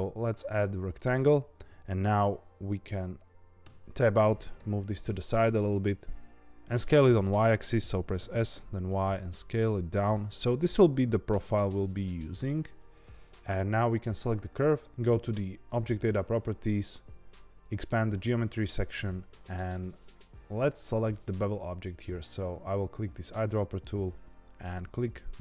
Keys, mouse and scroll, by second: 3.6 Tab, 4.5 g, 6.2 s, 8.1 s, 13.8 click, 15.6 click, 17.6 click, 18.1-19.5 scroll down 1, 19.5-21.2 scroll down 2, 23.0 click.